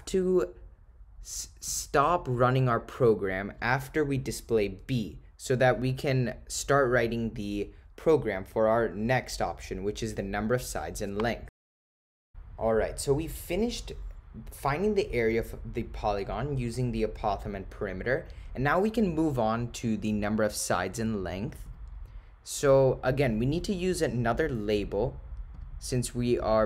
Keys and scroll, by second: 21.7 Return, 25.6 Right.